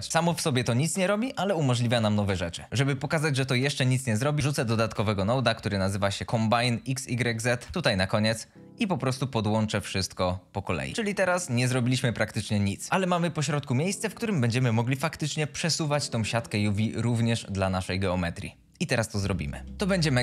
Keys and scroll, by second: 4.4-5.9 typing, 6.5 Return, 19.7 ctrl+s.